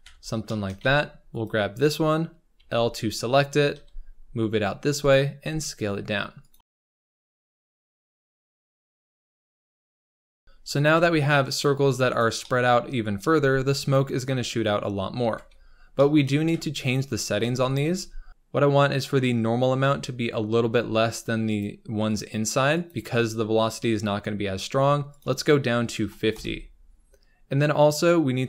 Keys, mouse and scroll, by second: 0.0 Tab, 0.4 shift+middle click, 0.7 Tab, 1.4 click, 2.5 l, 3.4 scroll down 4, 3.7 g, 5.3 s, 6.7 alt+a, 7.0-10.3 typing, 7.2 shift+middle click, 8.6 click, 8.8 scroll up 2, 9.9 scroll down 1, 10.0 Tab, 10.2 shift+middle click, 10.2 scroll up 2, 10.9 Tab, 11.6 click, 11.7 g, 12.3 shift+middle click, 13.1 click, 13.3 g, 15.1 Tab, 15.9 shift+middle click, 16.2 scroll up 2, 16.4 Tab, 17.0 click, 17.5 g, 17.8 s, 18.3 g, 20.6 Tab, 21.5 click, 22.1 click, 24.4 click, 26.3-28.4 drag.